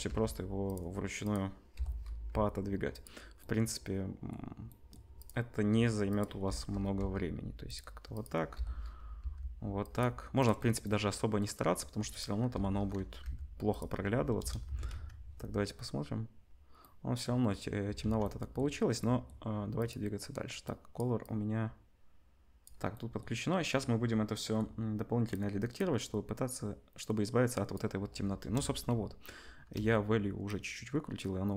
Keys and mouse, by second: 0.0 g, 1.2 click, 1.3-5.2 middle drag, 1.7 l, 2.3 g, 5.2 click, 5.3 middle click, 6.0 click, 6.2-10.3 middle drag, 6.4 l, 6.9 g, 8.5 l, 9.2 g, 10.3 click, 10.4-12.1 middle drag, 12.1 click, 12.2-19.7 middle drag, 12.5 l, 13.2 g, 14.3 KP_0, 14.6 Tab, 14.9 z, 18.0 ctrl+s, 19.7-20.9 drag, 20.9 middle click, 21.2-31.5 drag, 22.6-28.4 middle drag, 22.6-28.4 right drag, 28.4 KP_0.